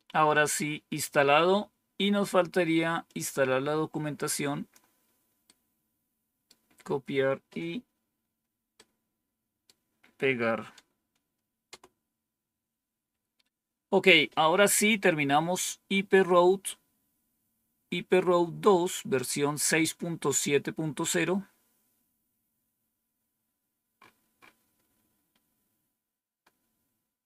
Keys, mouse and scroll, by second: 3.0-4.7 drag, 5.4-6.4 right drag, 8.7 right click, 11.6 Return, 21.1-21.8 scroll down 3, 23.4 scroll down 2, 23.9-24.4 scroll up 3, 25.4-26.3 scroll down 2, 26.3-27.2 scroll down 1.